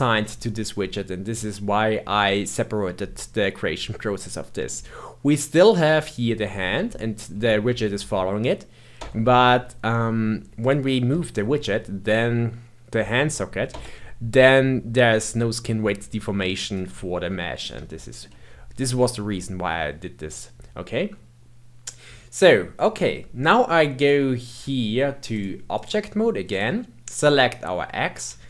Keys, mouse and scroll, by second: 4.3-5.5 middle drag, 5.5 click, 5.9 r, 10.6 click, 11.1 g, 16.8-20.1 middle drag, 20.1-23.2 scroll down 2, 23.9 click, 25.3-26.6 drag, 27.1 click.